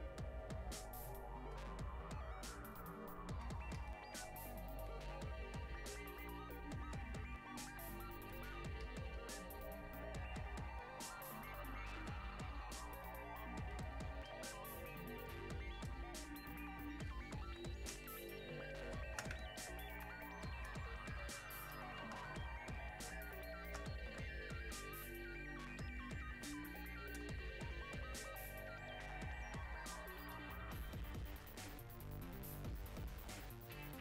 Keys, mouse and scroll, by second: 18.1 space, 18.6 click, 18.8 space, 19.6 alt+click, 22.2 space, 22.7 click, 23.1 space, 24.1-34.0 drag.